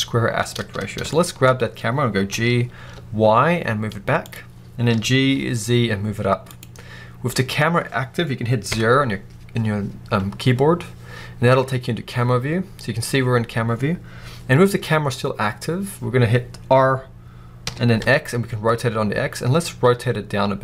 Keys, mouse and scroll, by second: 1.4 scroll up 1, 2.2 g, 4.3-4.8 scroll down 2, 4.8-6.5 middle drag, 4.8 g, 6.5 click, 6.9-8.5 scroll up 1, 8.5 KP_0, 11.3-14.0 scroll down 1, 17.5 r.